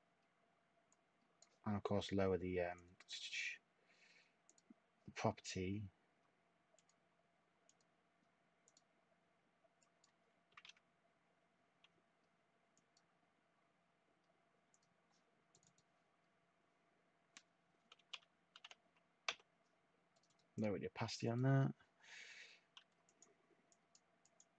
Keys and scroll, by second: 2.8-3.6 typing, 10.5 2, 10.5 Tab, 17.9 7, 18.6 5, 19.3 Tab.